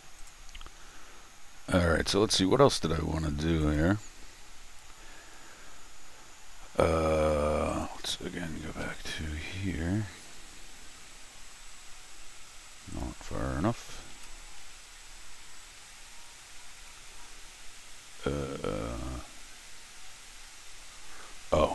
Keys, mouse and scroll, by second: 0.2 click, 1.6 shift+s, 2.7 shift+middle click, 3.6 shift+click, 4.0 shift+scroll down 1, 4.3 shift+middle click, 5.2 shift+middle click, 7.7 shift+click, 8.8 ctrl+alt+shift+r, 11.2 scroll down 2, 11.5-12.9 scroll up 2, 12.9 shift+click, 14.0 ctrl+alt+shift+r, 16.3 shift+middle click, 16.9-17.6 shift+scroll down 2, 17.6-19.7 shift+scroll up 2.